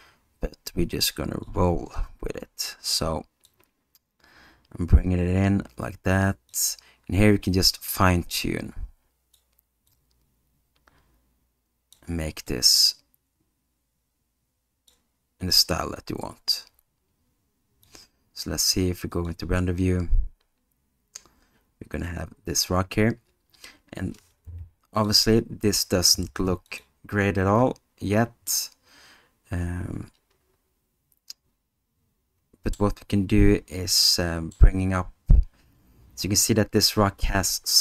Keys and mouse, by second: 3.5-6.5 drag, 7.3-9.4 drag, 10.0-11.9 drag, 12.5-15.0 drag, 15.6-17.9 drag, 19.2 click, 24.5 g, 26.7 click, 28.6-32.8 alt+middle drag, 33.9 middle click.